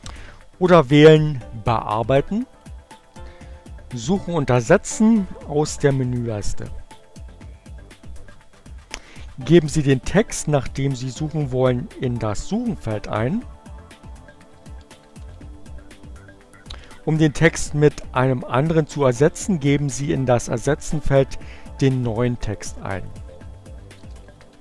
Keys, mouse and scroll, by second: 2.2 click, 6.1 click, 13.5-15.3 typing, 21.9 click, 22.9-24.3 typing.